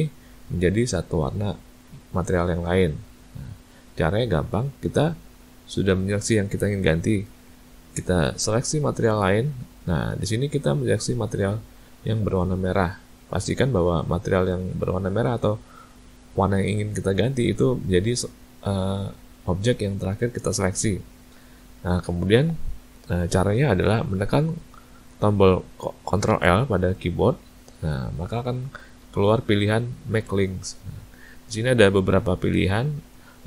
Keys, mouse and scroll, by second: 2.1 click, 9.5 shift+click, 26.4 ctrl+l.